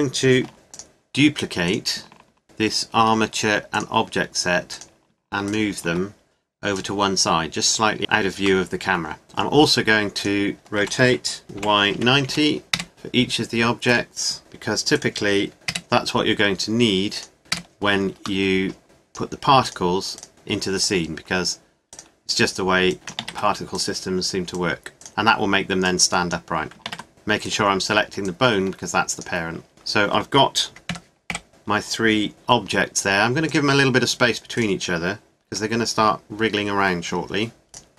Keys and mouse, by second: 0.5 shift+d, 1.7 click, 2.4 shift+d, 5.9 click, 7.7 click, 8.0 KP_0, 10.6 right click, 10.8 r, 13.9-14.9 right drag, 15.5 r, 17.1 click, 17.5 middle click, 18.5 click, 21.2 click, 21.9-23.2 right drag, 22.9 click, 23.2 ctrl+z, 23.2 click, 24.1 click, 25.7 right click, 26.9 ctrl+z, 30.9 KP_Decimal, 31.3 KP_7, 32.3 g, 34.6-37.1 drag, 35.5 g, 37.7 click.